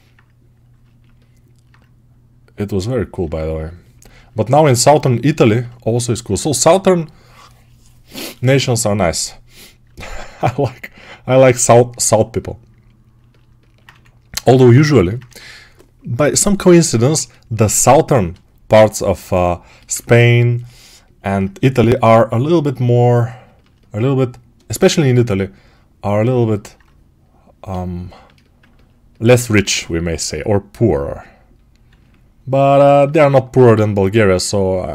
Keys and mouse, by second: 13.8 2, 13.8 1, 14.7-16.6 ctrl+alt+drag, 16.6-19.2 right drag, 16.6 1, 19.2-20.5 alt+shift+drag, 20.5-24.9 alt+shift+right drag, 28.5-34.9 ctrl+alt+right drag, 29.5 g.